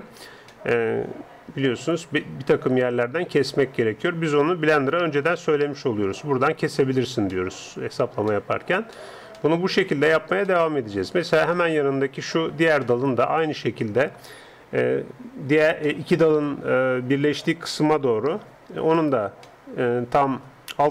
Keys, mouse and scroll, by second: 0.5-3.7 middle drag, 3.7-7.2 scroll up 1, 7.3-15.8 middle drag, 15.9-17.7 middle drag, 18.9 alt+right click, 19.5-20.9 middle drag.